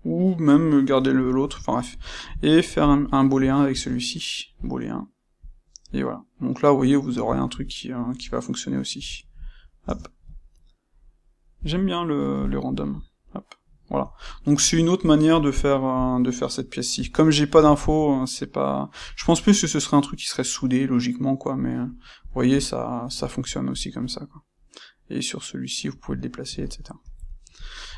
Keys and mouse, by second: 1.0-2.7 ctrl+middle drag, 2.7 shift+click, 3.0-11.5 shift+middle drag, 3.7 space, 5.4 click, 8.9 h, 9.8 Tab, 11.5-12.9 drag, 12.9-15.9 middle drag, 15.9 click, 16.9 h, 17.2-23.7 middle drag, 23.7 click, 24.0-27.9 middle drag.